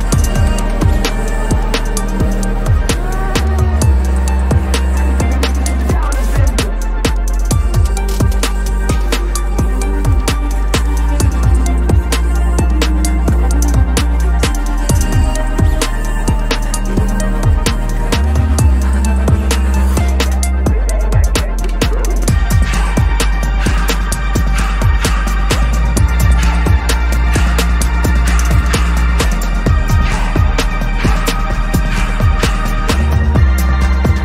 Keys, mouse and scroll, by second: 7.0 shift+click, 7.7 ctrl+g, 8.3 double click, 8.6-9.5 typing, 10.2 Return, 10.7 double click, 14.1 ctrl+=, 14.4 ctrl+=, 14.6 ctrl+=, 14.9 ctrl+=, 15.2 ctrl+=, 15.7 space, 16.5 ctrl+=, 17.0 space, 17.8 p, 21.3 double click, 21.9 right click, 24.6 ctrl+-, 24.9 ctrl+-, 25.3 ctrl+-, 25.7 right click, 27.7 [, 27.8 [, 27.9 [, 29.0 typing, 29.9 alt+click.